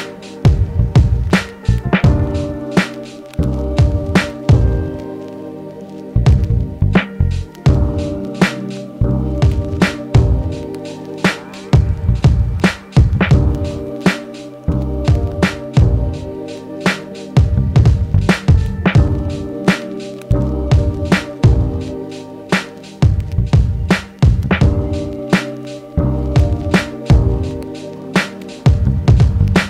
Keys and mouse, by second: 2.9 w, 5.9 middle click, 6.5-29.6 drag, 7.7 e, 14.1 w, 15.7-16.0 typing, 19.4 w, 21.2 r, 23.6 e, 25.6 w.